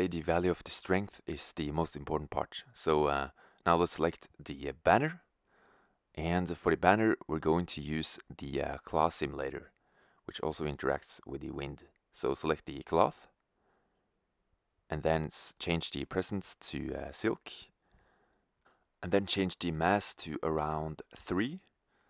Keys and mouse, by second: 4.4-6.1 right drag, 6.1 click, 13.3-15.1 drag, 18.4-20.2 drag.